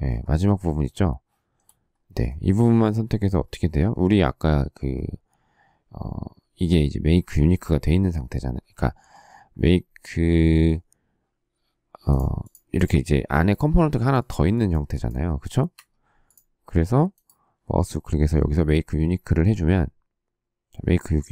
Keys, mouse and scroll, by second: 0.3 shift+middle click, 15.7 Escape.